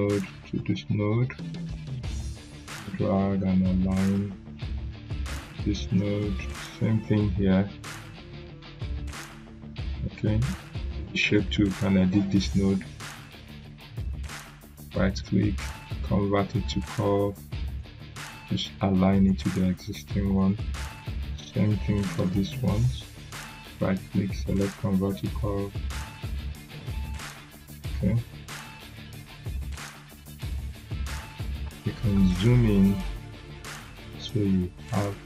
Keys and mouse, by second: 0.5 click, 12.5 click, 14.3 right click, 16.6-19.3 drag, 22.1 right click, 23.7-26.9 drag, 28.0 z, 28.9-29.9 drag.